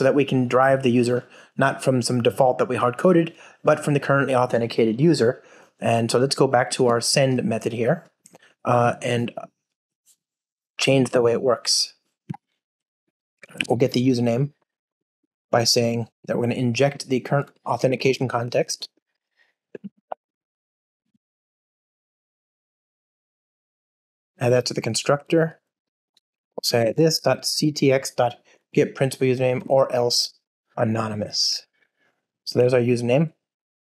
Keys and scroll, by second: 17.9 Return, 23.8 alt+Return, 28.4 Return, 29.5 Return.